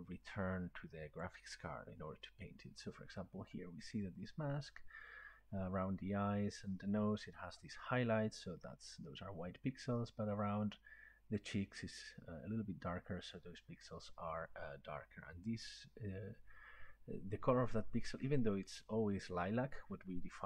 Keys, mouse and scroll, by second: 1.2-6.5 drag.